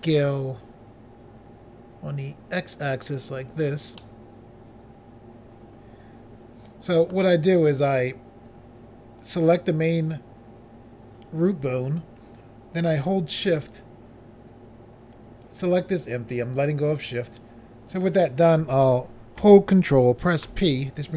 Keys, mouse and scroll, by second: 1.1 x, 3.6 click, 3.7 click, 4.1 middle click, 9.3 click, 9.4 click, 15.5 shift+click, 20.5 ctrl+p.